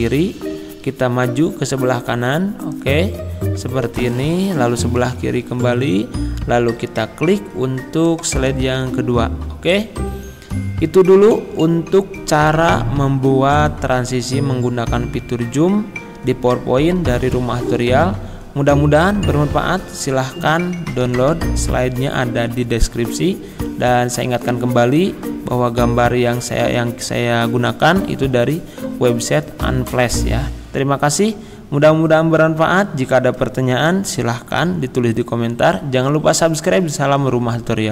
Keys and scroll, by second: 5.2 Left, 11.4 Escape.